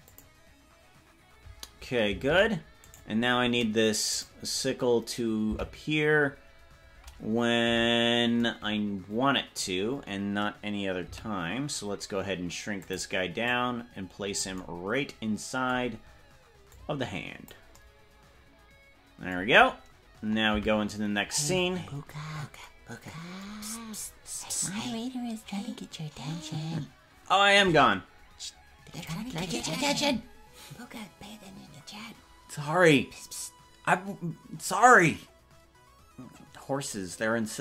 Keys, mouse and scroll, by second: 2.5 ctrl+Tab, 3.1 right click, 4.3 right click, 5.7 Left, 7.7 KP_Decimal, 11.1 s, 13.4-14.5 drag, 16.7 click, 20.8 Right, 21.6 KP_Decimal, 22.2-22.6 scroll down 11, 22.4 scroll up 1, 24.2 scroll up 1, 26.4 scroll down 1.